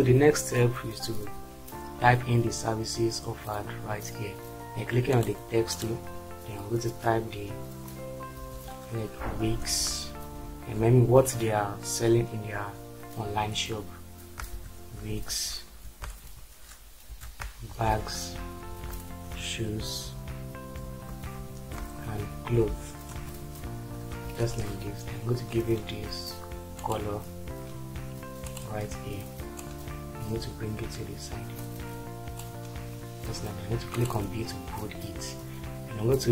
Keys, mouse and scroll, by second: 9.6 BackSpace, 10.3 shift+w, 14.5 shift+i, 14.9 shift+g, 15.9 Return, 16.2-18.2 typing, 18.7 Return, 19.3-21.1 typing, 22.4-23.7 typing, 24.5 ctrl+space.